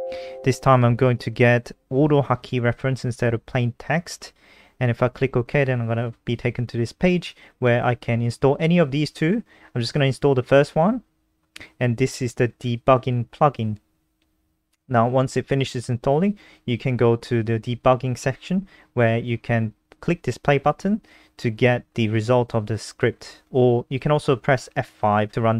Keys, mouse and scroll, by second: 22.6 click, 24.2 Return, 24.6 Up, 24.6-25.5 typing.